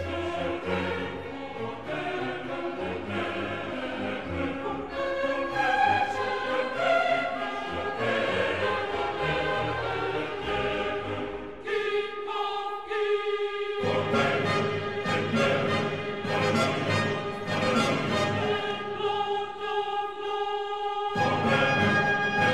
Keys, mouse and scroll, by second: 9.2 g, 10.4 z, 17.7 click, 18.4-22.5 middle drag.